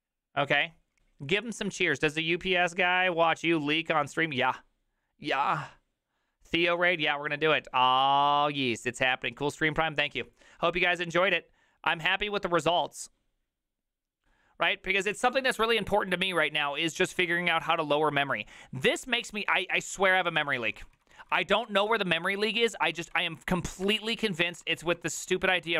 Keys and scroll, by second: 19.9 alt+{, 19.9 ctrl+a, 20.1 [, 20.2 ctrl+u, 20.4 ctrl+u, 20.8 ctrl+u, 22.3 ctrl+u, 22.3 ctrl+d, 22.7 ctrl+d, 22.9 ctrl+d, 23.1 ctrl+d, 23.9 ctrl+d, 24.7 alt+[, 25.3 alt+{, 25.6-25.7 typing.